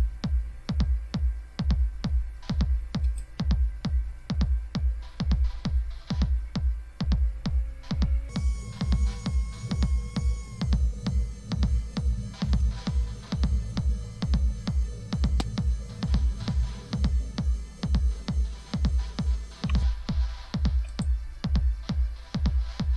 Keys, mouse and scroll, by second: 0.2-1.3 scroll down 2, 1.3-1.9 scroll down 1, 1.9-3.1 scroll down 1, 3.1 click, 3.4 click, 4.4-5.3 scroll down 2, 7.1-7.9 scroll down 2, 9.3-10.1 scroll down 2, 11.5-12.2 scroll down 2, 12.6 scroll down 2, 14.2-14.8 scroll up 2, 17.5 click, 20.9 click.